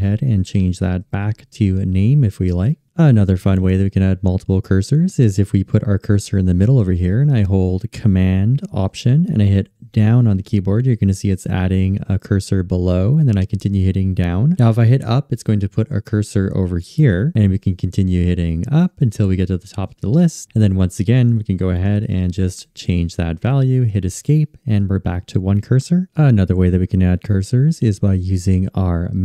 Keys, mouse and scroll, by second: 9.1 alt+super+Down, 15.3 alt+super+Up, 23.9 Escape.